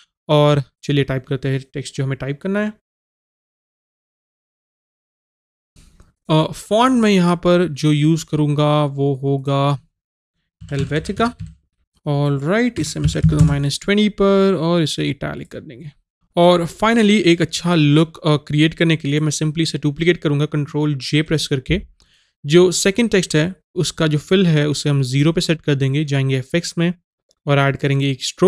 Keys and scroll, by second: 3.1 shift+u, 3.1 n, 11.0 typing.